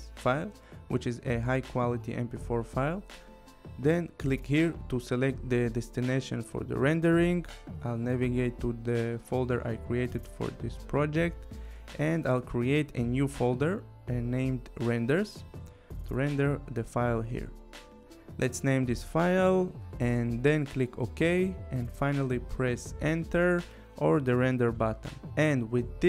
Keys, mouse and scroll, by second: 3.6 click, 5.0 click, 8.1 click, 8.8 right click, 11.2 click, 12.6 shift+r, 12.9 e, 13.7 r, 14.2 Return, 15.9 click, 17.1-20.0 typing, 20.0 Return.